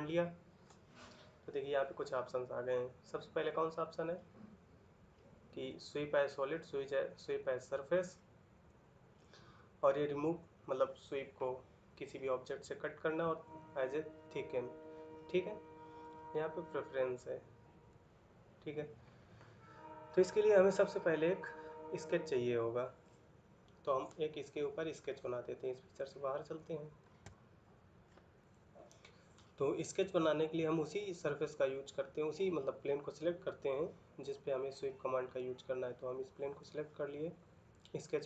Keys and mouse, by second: 29.9 middle click.